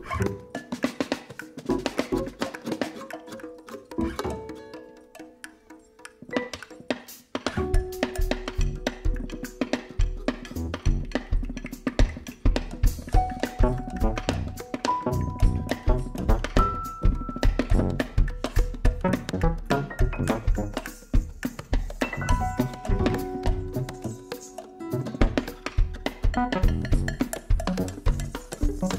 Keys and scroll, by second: 1.7 ctrl+r, 15.9 Caps_Lock, 23.6 x, 24.3 Delete, 26.1 ctrl+c, 26.5 ctrl+v, 27.6 ctrl+v, 28.5 ctrl+v.